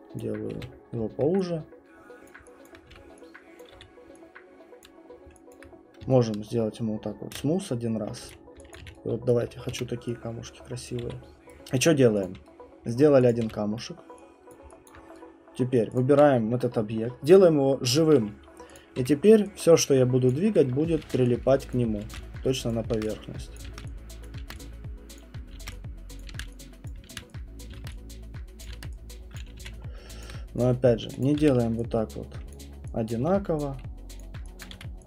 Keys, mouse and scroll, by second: 0.2 click, 0.5 f, 0.8 middle click, 0.9 middle click, 2.3 click, 2.6 alt+click, 2.9 w, 3.6 click, 3.7 e, 4.8 click, 5.1 middle click, 5.3 middle click, 5.5 alt+click, 7.3 shift+right click, 8.2-11.3 typing, 8.8 click, 9.3 right click, 10.9 click, 11.3 click, 11.5 right click, 11.6 middle click, 11.7 middle click, 11.8 middle click, 12.1 middle click, 12.2 click, 12.9 right click, 13.3 click, 13.4 w, 14.5 click, 14.9 alt+click, 15.8 right click, 16.0 click, 18.0 click, 18.7 click, 19.0 alt+click, 19.0 w, 20.0 middle click, 20.3 click, 21.1 ctrl+d, 21.7 click, 22.0 ctrl+d, 22.7 click, 22.9 ctrl+d, 23.6 click, 24.3 ctrl+d, 24.3 click, 25.2 click, 26.3 ctrl+d, 26.9 click, 27.2 ctrl+d, 27.6 click, 27.8 ctrl+d, 28.7 click, 28.8 ctrl+d, 29.4 click, 29.6 q, 29.8 middle click, 30.0 middle click, 30.3 alt+click, 30.6 click, 31.3 click, 31.3 alt+click, 31.4 r, 32.5 click, 33.1 click, 33.2 w, 34.2 click, 34.7 click, 34.7 e.